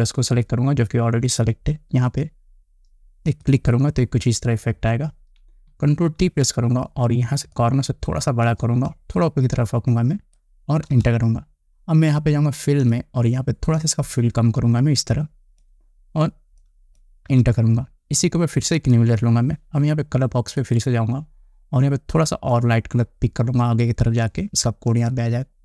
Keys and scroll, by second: 6.7 ctrl+t, 11.4 Return, 17.8 Return.